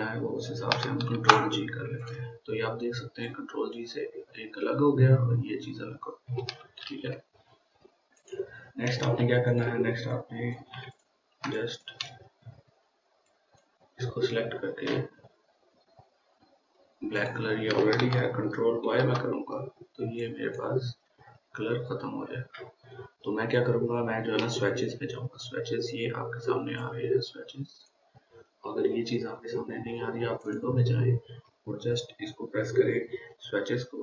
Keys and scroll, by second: 1.6 ctrl+g, 7.2 ctrl+z, 19.3 ctrl+y.